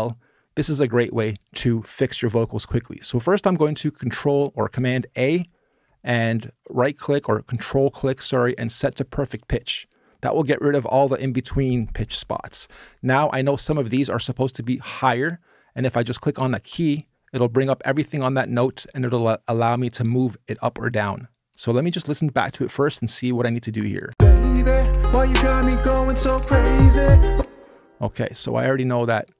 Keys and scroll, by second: 4.8 super+a, 23.8 space, 27.1 space.